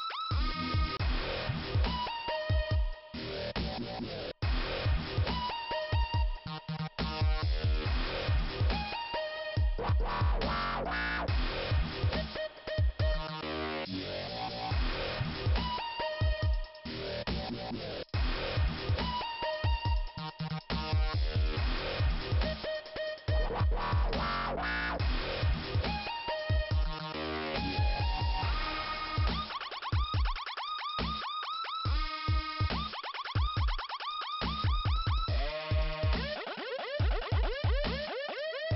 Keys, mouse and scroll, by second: 0.5 click, 8.6 click, 9.9 click, 11.2 click, 11.3 click, 14.5 click, 16.4 click, 18.3 click, 22.2 click, 25.3 click, 25.4 click, 26.4 click, 29.9 click, 31.8 click, 33.3 click, 34.4 click, 34.5 click, 35.2 click, 38.7 click.